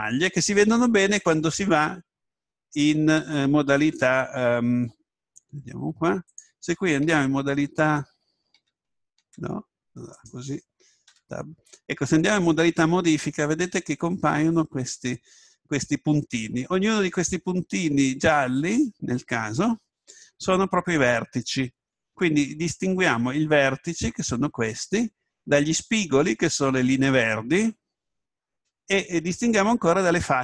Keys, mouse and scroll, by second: 7.4 Tab, 8.6 Tab, 10.8 right click, 11.1 Tab.